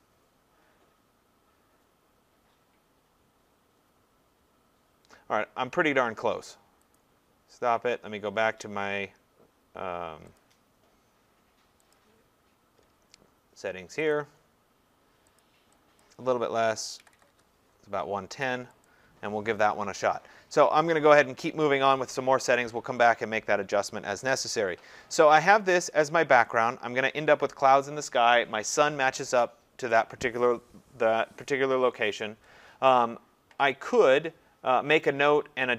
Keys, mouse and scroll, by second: 0.0 click, 4.3 click, 7.0 click, 10.4 click, 12.1 click, 14.1 click, 15.4 click, 16.0 click, 16.8-17.8 typing, 18.9 click, 22.5-24.0 drag, 26.6-31.7 drag.